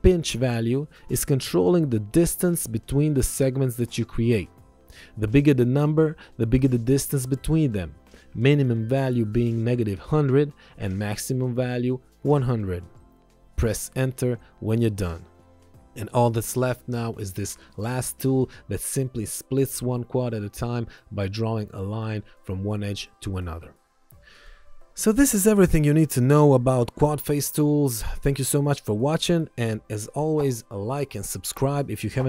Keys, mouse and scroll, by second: 0.8 KP_8, 1.1 KP_0, 2.5 BackSpace, 4.0 KP_Subtract, 4.4-6.6 typing, 5.5 KP_Subtract, 7.5 KP_Subtract, 7.7 KP_8, 7.8 KP_0, 8.0 Return, 9.6 KP_Subtract, 9.8 KP_1, 10.0 KP_0, 10.3 Return, 11.6 KP_1, 11.7 KP_0, 13.8 Return, 14.0 KP_5, 14.2 KP_0, 14.9 Return, 16.1 click, 25.1 ctrl+1, 29.5 click.